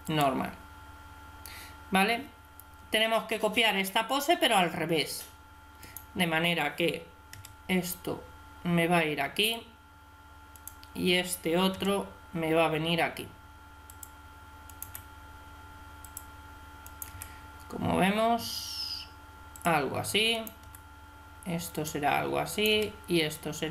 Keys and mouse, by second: 2.0 middle click, 3.7 middle click, 4.0 middle click, 4.3-5.7 middle drag, 5.7 right click, 7.2 r, 10.4 right click, 11.6 r, 14.5 right click, 14.7 r, 16.9 r, 17.6 right click, 20.2 right click, 20.5 r, 22.6 r, 22.6 right click.